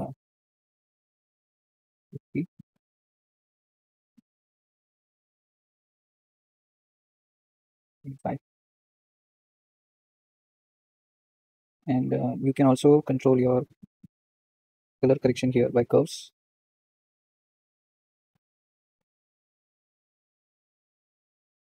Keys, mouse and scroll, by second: 2.8 KP_3, 3.6 g, 7.0-8.8 drag, 10.3 click, 14.1-15.3 drag, 17.0-21.7 drag.